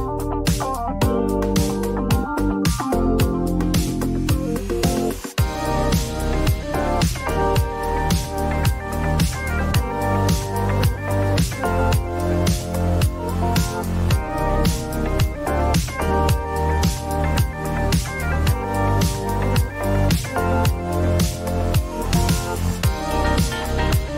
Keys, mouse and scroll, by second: 0.8 click, 1.2 r, 2.7 click, 3.1-3.5 typing, 4.7 click, 6.4 typing, 6.4 click, 6.9 Return, 7.8 click, 8.2 typing, 8.6 click, 8.8 Return, 11.5 click, 12.0-12.5 typing, 13.7 click, 14.0 typing, 14.4 ctrl+d, 16.1 click, 17.5 click, 18.3 click, 19.0 click, 20.0 r, 21.8 click, 22.8 click, 23.4 typing.